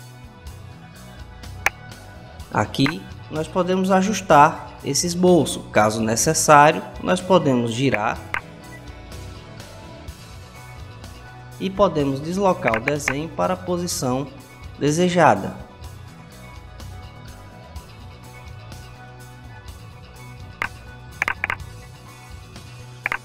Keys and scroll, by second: 9.0-10.4 typing.